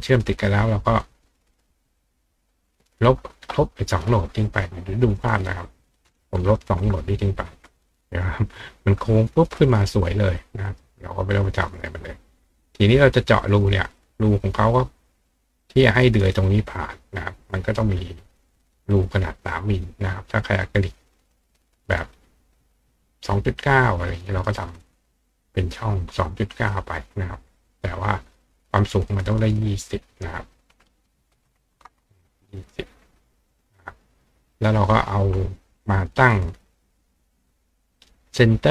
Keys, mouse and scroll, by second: 1.0 click, 2.5 click, 4.3 click, 5.1 click, 10.3 click, 10.7 right click, 10.8-13.4 middle drag, 13.4 click, 15.5 click, 17.7 click, 18.9-19.9 drag, 22.0 click, 24.7-25.8 drag, 30.3 click, 34.9 click, 36.7-38.7 ctrl+drag.